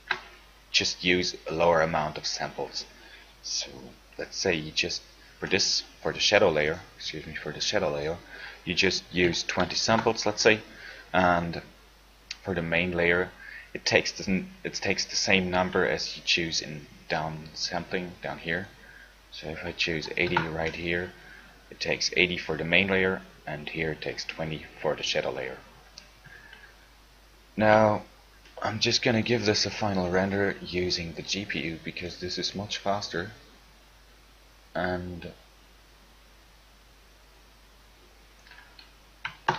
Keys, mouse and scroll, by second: 16.6-17.7 drag, 17.7 right click, 18.4-18.7 middle drag, 18.7 right click, 26.7 ctrl+Left.